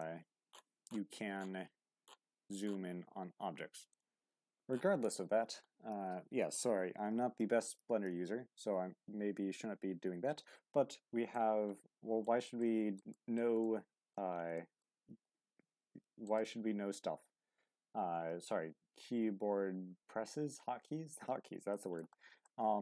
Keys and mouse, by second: 10.4-11.3 middle drag, 12.2 shift+middle drag, 12.6-13.0 middle drag, 13.1 shift+middle drag, 13.6-14.1 middle drag, 14.5 shift+middle drag, 16.2 right click, 21.7 shift+middle drag, 22.5-22.8 shift+middle drag.